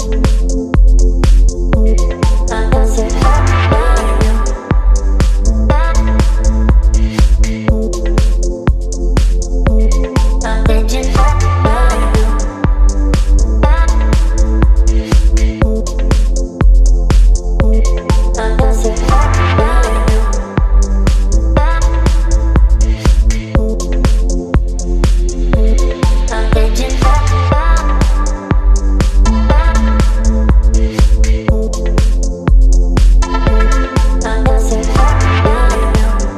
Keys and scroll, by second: 6.6 space, 28.0 Return, 29.2 space, 33.8 ctrl+m.